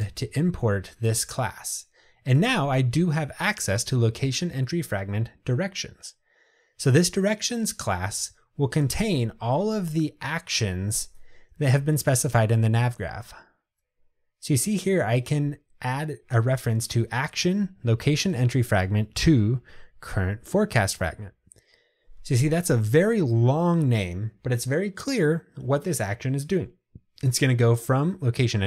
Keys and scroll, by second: 0.2 alt+Return, 13.8 Return.